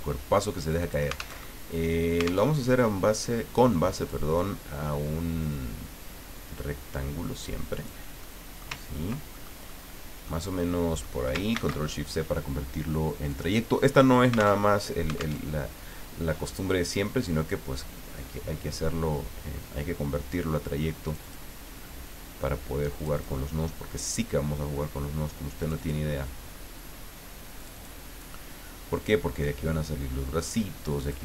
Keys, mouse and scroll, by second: 0.8 click, 1.4 alt+Tab, 2.5 alt+Tab, 4.1-5.4 drag, 5.4-6.2 scroll down 4, 8.4 ctrl+click, 8.9 ctrl+scroll down 2, 9.4-10.4 ctrl+drag, 10.7 click, 11.5 ctrl+shift+c, 13.3 click, 14.7 alt+Tab, 15.4 alt+Tab, 16.6-17.9 drag, 21.0 click, 23.0 click, 25.6 click, 27.6 click, 29.8-31.2 drag.